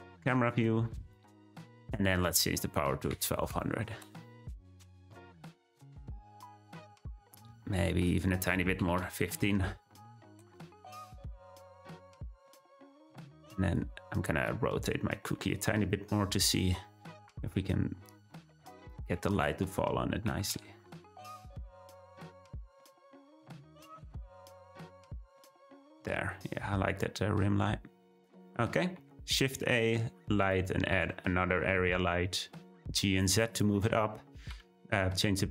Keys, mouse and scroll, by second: 3.4 0, 5.5 scroll up 1, 8.0-9.4 drag, 9.4 0, 11.8-12.1 middle drag, 12.1-13.4 scroll down 6, 13.4-14.9 drag, 15.4 `, 17.3 r, 19.4-19.9 drag, 20.2 r, 25.0 click, 25.8-26.2 scroll up 1, 28.4-29.0 scroll down 1, 29.0 shift+a, 30.8 g, 34.5 ..